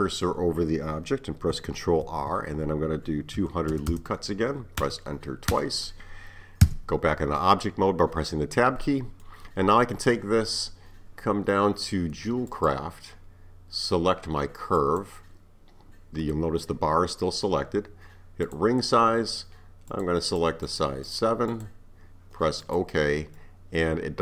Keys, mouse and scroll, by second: 2.1 ctrl+r, 6.7 Tab, 7.4-11.9 middle drag, 12.5 click, 14.8-17.8 drag, 23.4-24.2 middle drag.